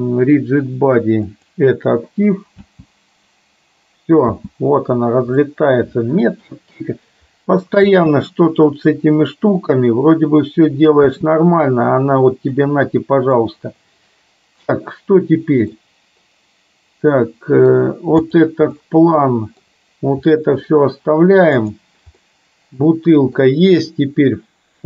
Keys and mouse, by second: 2.7 space, 4.5 space, 5.5 middle click, 7.8 space, 11.2 space, 12.7 middle click, 15.8-17.8 middle drag, 18.5 click, 18.8 middle click, 20.5 middle click, 21.8 click, 22.4-23.5 middle drag.